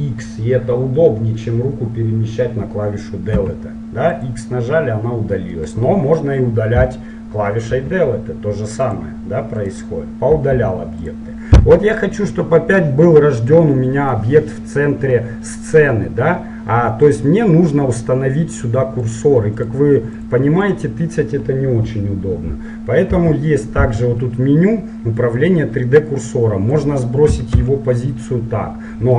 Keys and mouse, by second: 3.3 x, 5.8-7.7 right drag, 7.7 Delete, 9.7-12.0 right drag, 10.5 Delete, 13.7-16.9 middle drag, 17.1-19.0 drag, 19.0 middle click, 19.2-23.1 drag, 23.1 n, 26.4-28.2 drag.